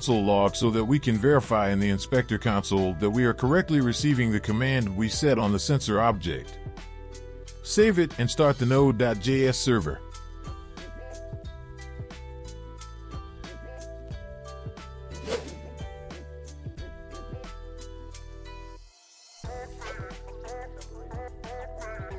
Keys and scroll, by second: 1.4 Return, 1.7 Return, 2.2 ctrl+v, 5.6 ctrl+s, 9.5-12.8 typing.